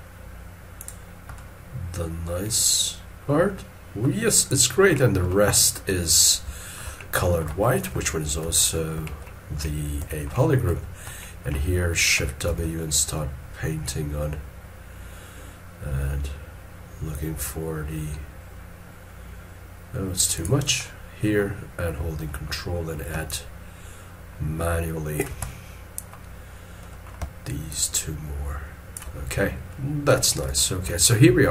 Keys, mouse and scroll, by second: 1.3 middle click, 6.4 middle click, 7.0 shift+middle click, 7.6 shift+middle click, 8.6 shift+middle click, 9.0 middle click, 9.0 shift+scroll down 1, 10.0 middle click, 12.2 middle click, 12.5 shift+w, 20.8 middle click, 23.1 scroll, 23.3 ctrl+click, 25.5 middle click, 27.7 ctrl+click, 29.4 scroll down 1, 30.5 shift+middle click.